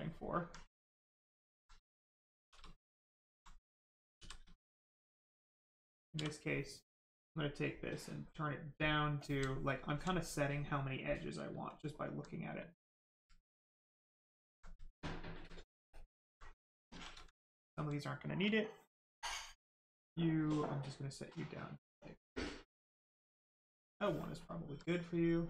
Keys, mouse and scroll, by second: 1.1 alt+click, 2.3 shift+d, 2.8 alt+d, 2.9 alt+click, 4.1 shift+d, 4.5 right click, 6.1 d, 8.1 click, 9.5 alt+right click, 10.9 right click, 10.9 right click, 11.6 alt+click, 13.3 alt+click, 14.9 alt+right click, 15.6 ctrl+right click, 15.9 ctrl+click, 16.9 shift+d, 17.5 alt+click, 20.5 click, 23.3 click, 24.3 alt+right click, 25.0 right click, 25.1 right click, 25.3 shift+right click.